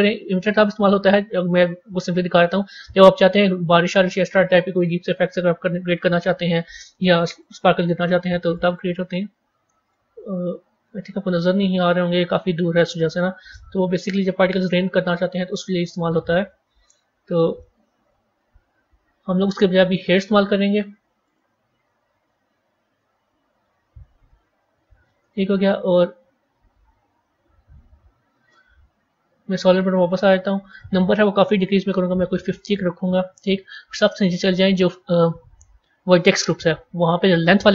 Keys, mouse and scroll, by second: 2.2-5.2 drag, 7.3-10.0 drag, 10.0-11.1 scroll down 10, 12.1-14.4 middle drag, 14.4-16.2 drag, 16.2-17.1 scroll up 14, 17.5 middle click, 18.2-21.6 scroll down 2, 24.1-29.0 drag, 29.0 z, 30.6-33.6 drag, 33.6-36.0 scroll down 10, 36.0 click, 36.5 scroll down 2, 37.3-37.7 drag.